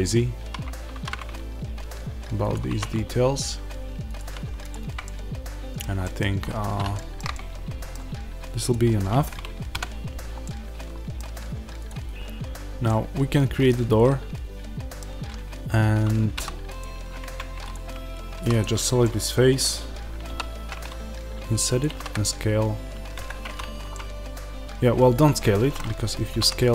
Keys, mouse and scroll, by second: 0.8 alt+d, 2.4 click, 2.6 alt+d, 4.1 click, 4.9-5.9 middle drag, 6.3-8.6 middle drag, 6.3-6.8 scroll up 2, 8.6 click, 9.7 KP_Decimal, 10.4-11.8 middle drag, 11.8 click, 12.8-16.7 middle drag, 16.7 click, 17.2 Tab, 18.3 3, 18.4 click, 18.9-21.7 middle drag, 21.7 click, 21.8 s, 23.2 Escape, 23.8-26.7 middle drag, 26.2 s.